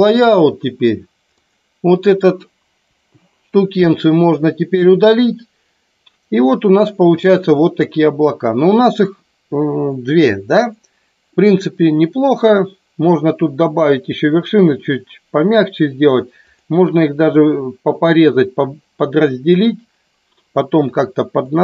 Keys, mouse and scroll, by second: 1.4 click, 2.9 Delete, 16.4 click, 21.4-21.6 middle drag.